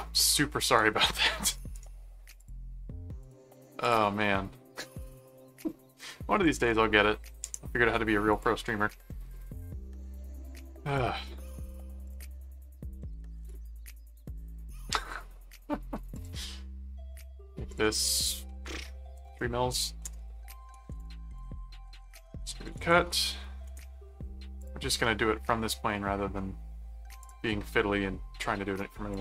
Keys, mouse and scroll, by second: 0.6 right click, 1.5 right click, 2.4 click, 3.2 click, 3.8 click, 8.3 click, 11.2 middle click, 12.0 click, 12.3 middle click, 12.7-14.4 typing, 16.1 click, 17.7 click, 20.7 ctrl+5, 21.0 click, 21.4-23.5 typing, 23.7 Return, 24.6 click, 27.2 click, 29.1 click.